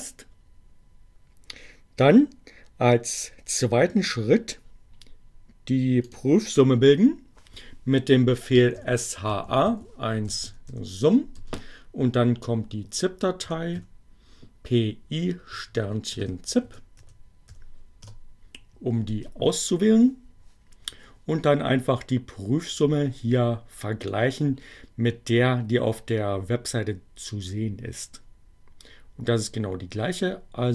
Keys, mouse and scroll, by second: 5.6 click, 7.2-10.7 typing, 12.1-13.1 typing, 15.2 shift+z, 16.8 i, 17.5 p, 17.7 Return, 23.2 click.